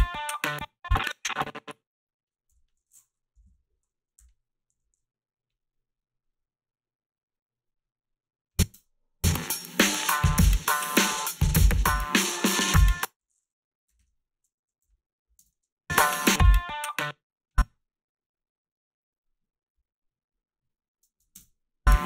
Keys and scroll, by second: 2.5 g, 3.4 -, 3.5 -, 4.2 h, 8.7 space, 12.8 space, 13.9-15.4 typing, 16.8 space, 21.4 space.